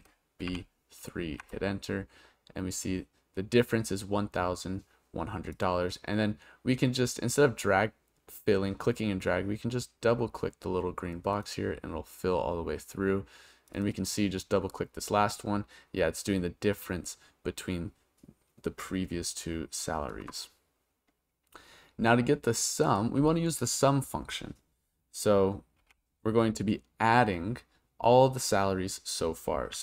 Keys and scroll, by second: 0.5 3, 1.4 Return, 25.8 =, 29.5-29.8 typing.